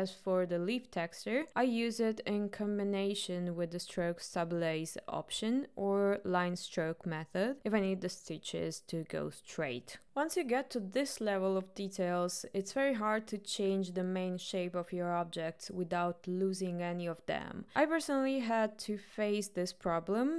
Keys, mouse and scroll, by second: 0.0 shift+middle click, 0.8-3.1 drag, 3.7-7.3 drag, 9.1 click.